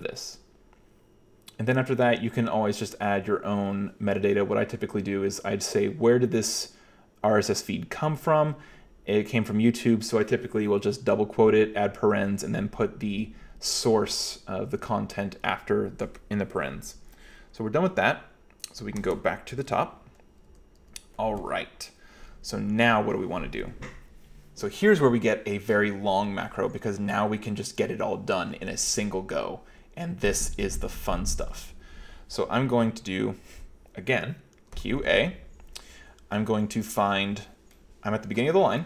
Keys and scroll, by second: 17.9 k, 18.8 Escape, 19.0 Escape, 19.2 Escape, 19.6 g, 19.7 g, 20.5 k, 20.8 k, 34.8 q, 35.0 a.